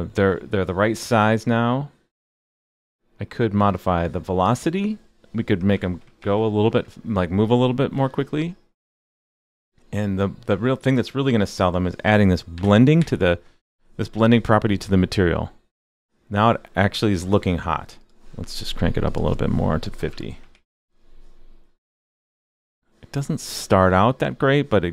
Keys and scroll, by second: 6.2 super+s, 12.5 super+/, 13.0 super+s, 20.5 super+s.